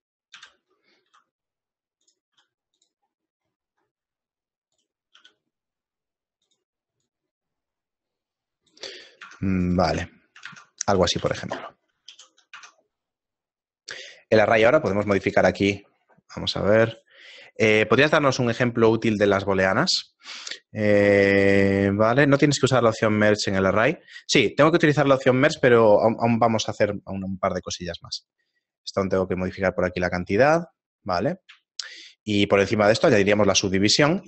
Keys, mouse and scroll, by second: 0.4 ,, 1.1 r, 2.4 s, 3.1 middle click, 3.5-4.3 scroll down 3, 4.8 right click, 5.2 g, 7.1 right click, 9.3 Tab, 9.7 right click, 10.1 shift+middle click, 10.6 Tab, 12.1 ctrl+n, 12.1 a, 12.5 Tab, 15.1 click, 28.1-31.7 click, 28.2 click, 31.7 shift+middle click, 32.9 ctrl+2, 33.9 right click.